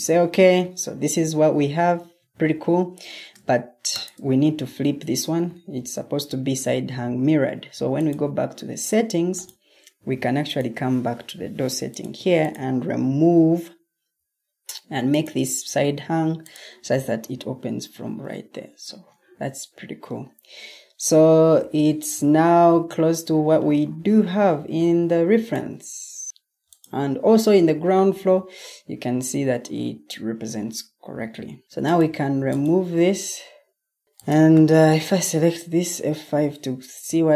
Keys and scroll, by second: 1.9 Escape, 5.7 ctrl+t, 18.7 Escape, 21.5 o, 31.6 Escape, 35.9 F5.